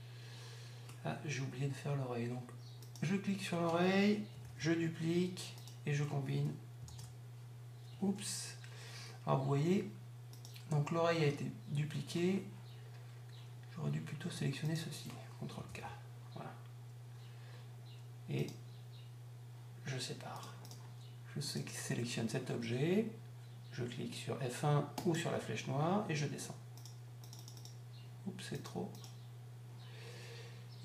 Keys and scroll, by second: 1.5 F2.